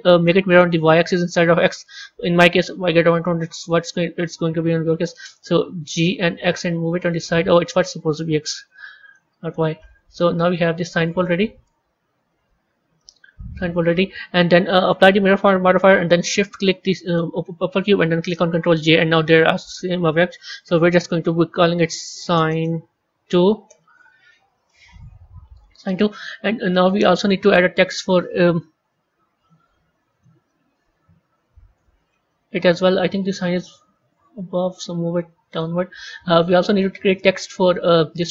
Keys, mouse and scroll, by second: 0.4 click, 0.9 click, 5.8 g, 8.3 click, 8.9 click, 9.7-11.6 middle drag, 11.6 Tab, 12.9-15.3 middle drag, 15.3-17.1 drag, 18.6 ctrl+j, 20.6 click, 20.8-23.9 drag, 26.8-27.3 scroll down 1, 27.3-29.3 middle drag, 29.3 a, 30.0 drag, 30.4-32.4 middle drag, 32.4 KP_3, 33.5 g, 36.6 click, 37.0-38.3 middle drag.